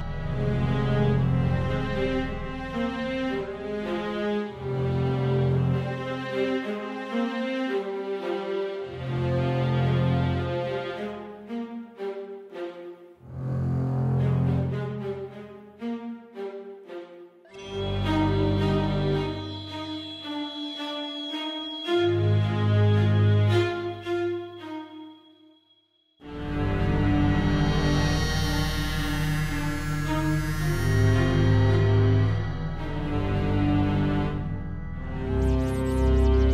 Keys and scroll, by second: 5.4 d, 8.8 super+d, 12.0 Left, 12.0 Left, 24.5 Left, 29.4 Up.